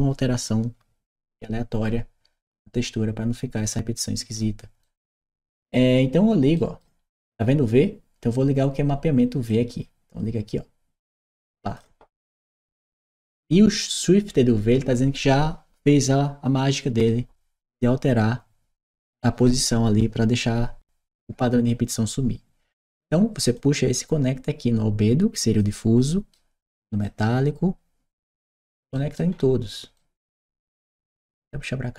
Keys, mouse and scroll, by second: 3.5-4.2 drag, 4.7 right click, 6.4 right click, 6.9 middle click, 6.9 scroll down 1, 9.3-11.6 drag, 13.3 click, 23.3-26.1 drag, 25.9 right click, 26.8-28.4 drag, 28.8 right click, 29.8-30.3 right drag, 30.5 middle click, 30.8 right click, 31.4-31.9 drag.